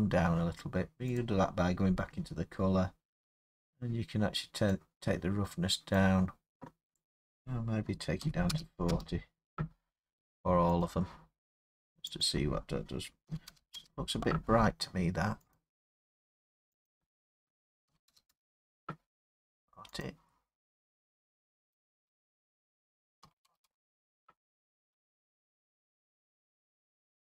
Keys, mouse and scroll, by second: 1.2 click, 1.9 middle click, 1.9 middle click, 2.0-2.5 middle click, 2.1 middle click, 2.8 middle click, 5.9 click, 7.2 click, 8.2 typing, 8.9 Return, 10.8 click, 11.9 typing, 12.2 click, 13.3-13.8 typing, 15.6 click, 16.9 click, 17.9-18.9 typing, 20.0 click, 21.9 click, 23.2-23.6 typing, 24.7 Return.